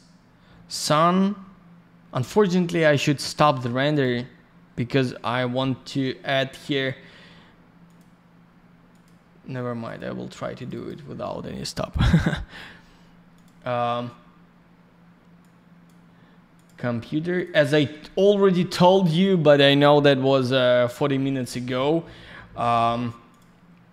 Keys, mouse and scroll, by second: 15.3 click, 17.3 click.